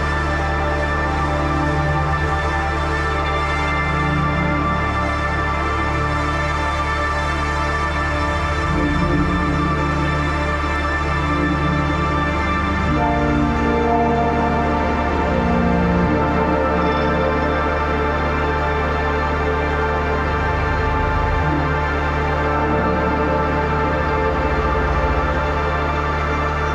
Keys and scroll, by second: 5.9 ctrl+t, 11.8 ctrl+t, 22.5 Down, 23.5 Up.